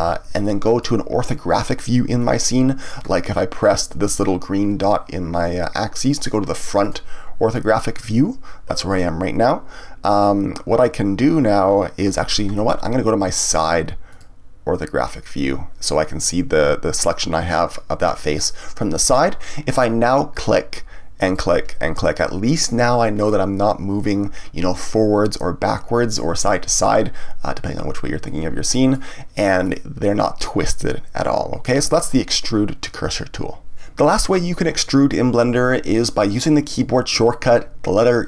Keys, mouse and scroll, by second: 0.4-5.2 middle drag, 6.8 click, 14.1 click, 20.3 click, 21.2 click, 21.9 click, 22.5 click, 23.1 click, 28.2-32.6 middle drag.